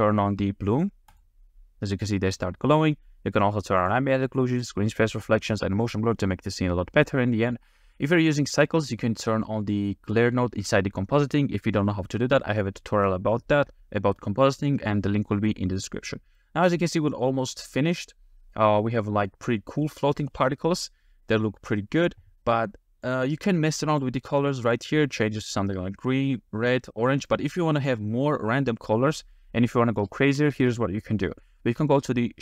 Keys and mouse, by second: 1.1 click, 3.8 click, 4.5 click, 5.8 click, 16.4-17.6 middle drag, 23.1 click, 23.9 click, 30.2-31.2 middle drag, 30.2 space.